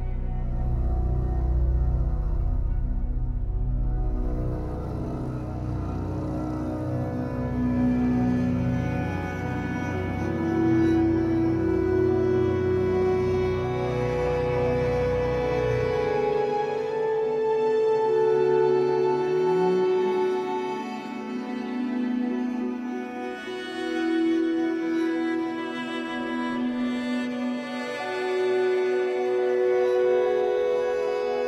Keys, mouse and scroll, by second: 0.2-2.3 shift+middle drag, 1.0 e, 2.3 click, 2.6-4.6 shift+middle drag, 3.3 e, 4.6 click, 5.2 e, 6.4 click, 6.7-8.7 shift+middle drag, 7.5 e, 8.7 click, 9.3 e, 10.2 click, 10.3-12.3 middle drag, 10.9-11.3 scroll up 2, 11.7-12.3 scroll up 2, 12.3-15.7 shift+drag, 15.7 f, 16.3 scroll down 2, 16.5-20.7 middle drag, 17.2 scroll down 2, 18.9 scroll up 2, 20.7-25.8 drag, 25.8-27.1 middle drag, 26.4 scroll down 1, 26.7 scroll up 1, 27.1-28.3 drag, 28.3 KP_1, 28.8 scroll down 1, 28.9-31.4 shift+middle drag, 29.9 f.